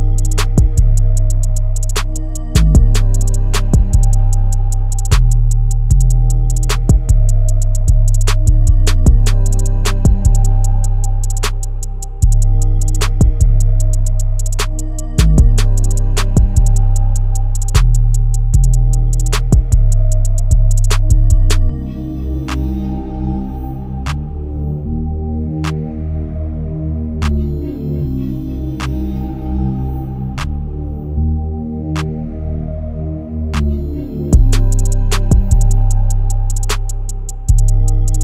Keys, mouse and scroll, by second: 0.0 click, 1.0 right click, 2.3 click, 3.0 scroll down 1, 3.4 scroll up 1, 4.7 ctrl+click, 9.4 scroll down 1, 11.9 scroll up 1, 12.4-14.0 drag, 16.8 click, 22.6 scroll up 1, 23.3-24.7 drag, 24.7 scroll down 1, 29.4-29.8 scroll up 1, 30.4-32.2 drag, 32.8 scroll down 1, 33.8-34.6 scroll up 1, 34.6 click.